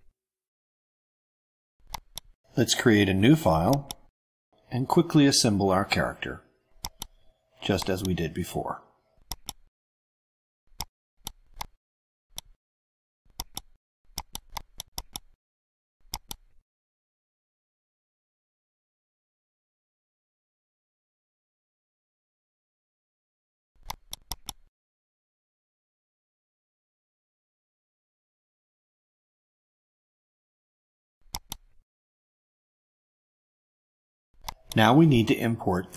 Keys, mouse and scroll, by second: 2.1 click, 3.7 click, 5.6 click, 6.8 click, 7.4 click, 9.3 click, 10.7-11.4 drag, 11.6-12.6 drag, 13.3 click, 14.1 click, 14.6 shift+click, 14.9 shift+right click, 16.1 click, 17.0-17.8 drag, 18.8 click, 19.8 click, 21.3 click, 21.7-22.2 drag, 22.9 click, 24.0 click, 24.3 click, 25.5-26.3 drag, 26.6 click, 27.2 click, 28.3 click, 29.3 click, 30.9 click, 31.3 click, 31.5-32.8 typing, 32.8 Return, 34.4 click.